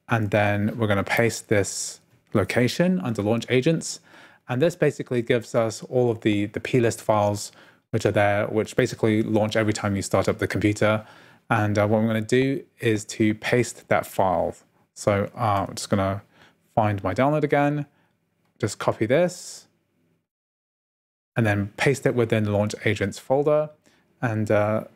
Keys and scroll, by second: 1.2 super+v, 3.0 Return, 15.7 super+t.